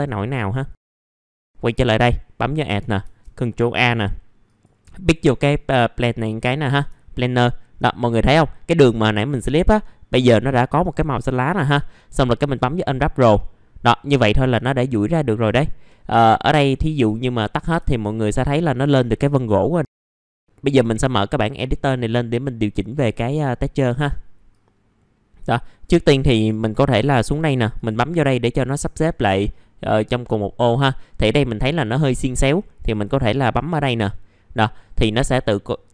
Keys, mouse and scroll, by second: 0.3 middle click, 0.7-1.3 scroll up 1, 1.3-2.7 drag, 3.2 a, 4.4 click, 5.9 middle click, 6.4-6.8 scroll down 1, 6.9 alt+middle click, 7.9 middle click, 12.2 click, 15.0 middle click, 15.5 alt+middle click, 16.1 F2, 16.7 alt+middle click, 18.4 middle click, 18.7-19.5 scroll up 1, 20.6 click, 22.9 middle click, 24.5 click, 30.1 middle click, 30.2-32.8 scroll down 1, 32.8 click.